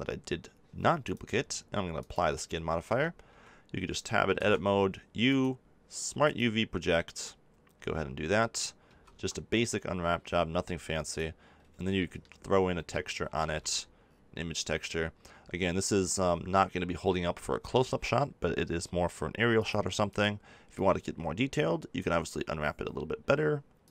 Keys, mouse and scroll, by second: 2.8 Tab, 3.2 a, 4.3 u, 8.8 a, 9.1 Tab, 11.0-12.0 drag, 20.7-23.9 drag.